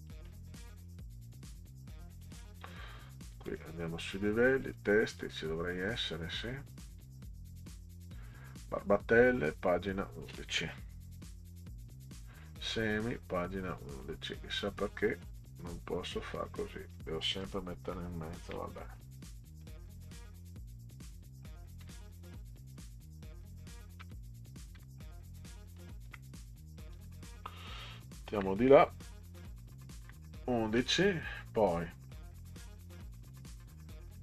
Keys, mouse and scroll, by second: 0.1 click, 2.1 click, 2.3 click, 3.5 click, 4.6 click, 5.1 click, 6.7 click, 6.9 click, 9.3-10.3 drag, 11.4 1, 12.4-14.0 drag, 15.0 click, 16.3 1, 18.4 Delete, 19.4 click, 21.8 1, 22.7 Delete, 24.0 BackSpace, 24.8 1, 26.1 BackSpace, 28.3 Left, 30.0 1, 32.2 scroll down 2, 33.1 click, 33.3 click.